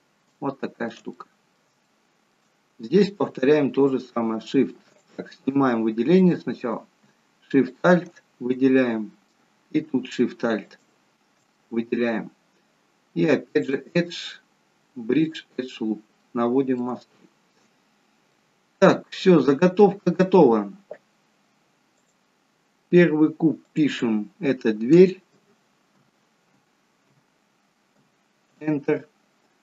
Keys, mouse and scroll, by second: 0.4 shift+middle click, 1.2 middle click, 1.9 shift+middle click, 2.7-3.4 scroll up 2, 6.0 click, 6.2 click, 7.7 alt+shift+click, 8.8 shift+middle click, 10.6 alt+shift+click, 11.6 middle click, 13.7 click, 15.9-16.9 scroll down 3, 16.3 middle click, 17.0 shift+middle click, 17.9-18.9 scroll up 3, 18.4 middle click, 19.9 middle click, 20.5 shift+middle click, 22.0 click, 23.7 click.